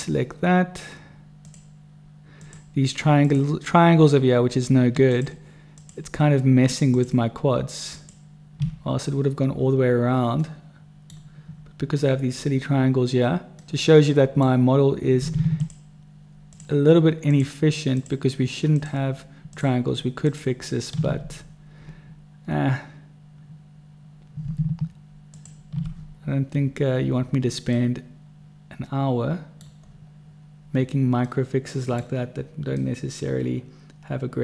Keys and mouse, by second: 1.3 shift+right click, 5.1 shift+click, 5.7 shift+click, 6.8 shift+click, 7.9 shift+click, 10.4 middle click, 13.6 middle click, 15.5 shift+middle click, 17.3 shift+right click, 17.9 shift+right click, 20.2 shift+right click, 21.3-24.5 middle drag, 25.3 shift+click, 27.7 click, 27.7-29.5 middle drag, 27.7 right click, 29.5 click, 29.5 right click, 31.2 click, 31.2 right click, 31.5 middle click, 32.8-34.4 middle drag.